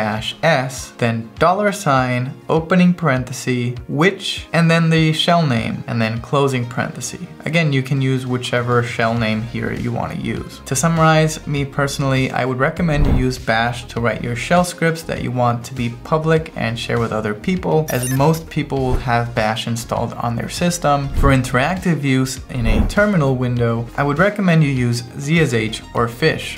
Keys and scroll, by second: 0.0-1.5 typing, 3.7-5.8 typing, 7.3 Return, 17.7 ctrl+e.